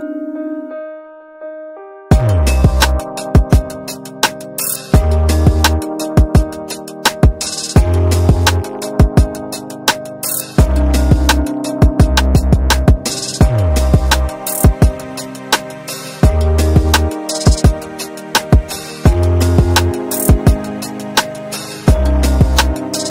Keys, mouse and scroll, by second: 1.3 scroll up 1, 2.2-4.2 drag, 4.2 scroll down 1, 5.0 scroll up 1, 6.1 scroll down 1, 6.7-8.4 drag, 8.4 scroll up 1, 9.8 click, 10.6-12.7 ctrl+drag, 12.7 ctrl+space, 13.1 shift+click, 13.4 c, 14.3 scroll down 1, 15.3 click, 15.7-16.0 scroll up 1, 16.4 shift+click, 18.1 3, 18.7-20.1 scroll down 1, 20.1-23.1 drag.